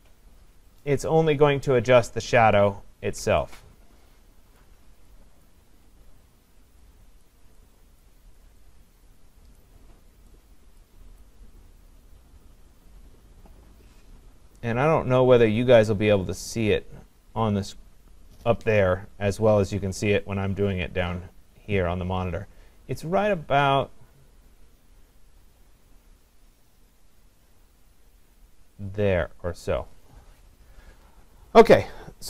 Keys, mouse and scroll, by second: 2.1 click, 4.5 click, 5.5 click, 7.2 click, 8.0 click, 9.6 click, 10.8 click, 29.6-32.2 drag.